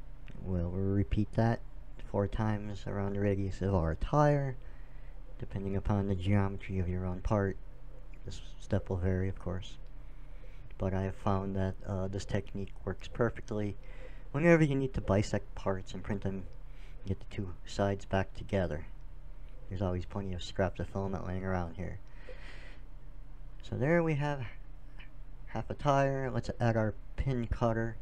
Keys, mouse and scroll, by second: 5.0 shift+d, 5.6-7.2 drag, 6.4 r, 10.7 a, 11.1 a, 12.4 shift+d, 14.3 r, 19.0 Tab, 20.5 middle click, 23.1-25.1 drag, 25.7 t, 26.2 BackSpace, 26.4 BackSpace, 27.3 t.